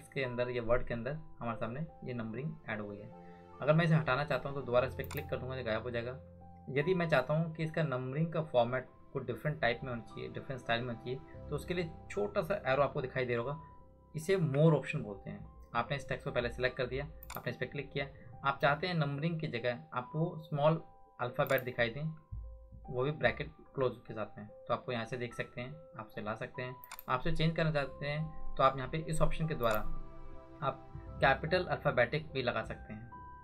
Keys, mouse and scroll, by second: 5.0 click, 12.9 ctrl+click, 13.1 ctrl+1, 14.4 ctrl+1, 17.2 click, 21.5 click, 26.8 click, 29.6 click.